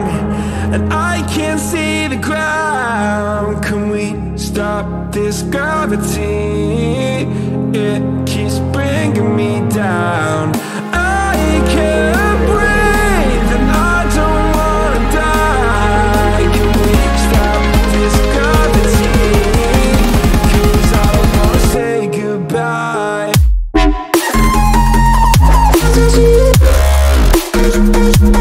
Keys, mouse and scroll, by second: 10.5 click, 10.9 click, 11.4 drag, 15.6-24.2 drag.